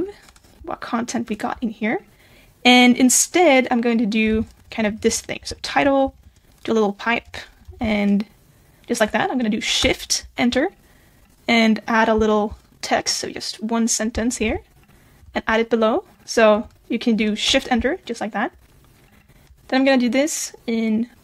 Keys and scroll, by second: 4.3 super+b, 6.0 alt+7, 14.4 super+c, 15.2 super+v.